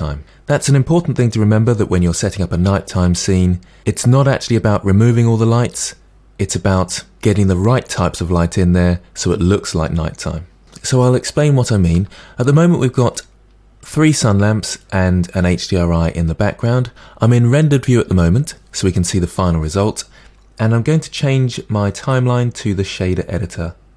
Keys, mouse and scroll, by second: 11.9-13.0 middle drag, 13.0 click, 13.8 click, 14.8 click, 22.0-23.9 drag.